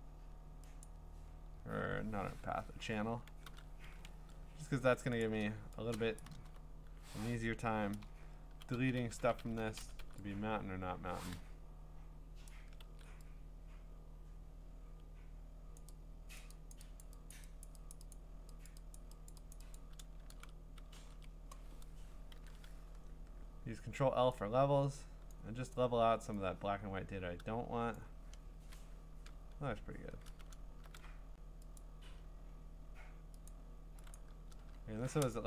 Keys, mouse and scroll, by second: 0.9 click, 3.5 ctrl+i, 3.8 ctrl+d, 5.2 click, 6.4 click, 6.4 b, 7.9 ], 9.0-10.0 typing, 12.5 click, 12.8 ctrl+z, 15.8 click, 16.4 click, 16.7 click, 17.3-21.8 drag, 20.3 ctrl+z, 20.9 ctrl+z, 22.3 ctrl+i, 23.4 ctrl+l, 25.1 ctrl+i, 25.3 click, 27.9 click, 28.6 Return, 29.4-30.2 scroll, 31.8 click, 33.5 click, 34.5 click, 34.5 scroll.